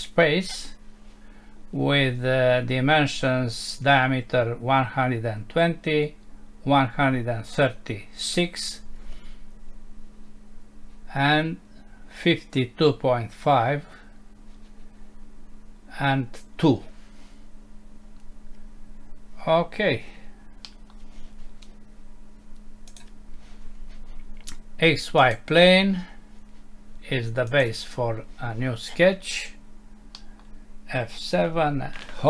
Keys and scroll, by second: 20.6 Home, 30.2 Home, 31.4 F7.